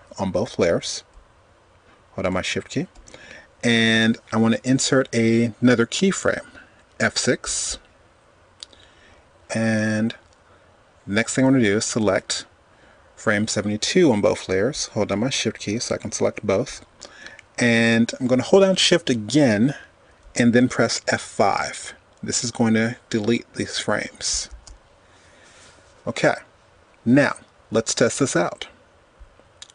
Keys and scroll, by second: 3.8 F6, 7.9 F6, 22.8 shift+F5.